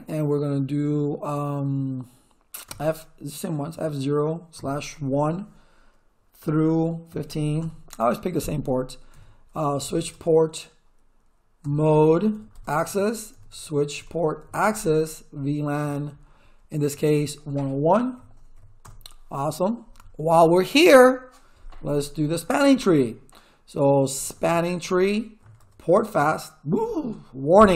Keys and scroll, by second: 2.6 f, 3.7 0, 4.6 /, 5.0 1, 6.4-7.8 typing, 9.1-10.4 typing, 11.6-15.0 typing, 11.8 Tab, 12.5 Tab, 12.8 Return, 14.7 Tab, 15.8 Tab, 17.9-19.0 typing, 23.9-25.4 typing, 25.6 Tab, 26.1 Return.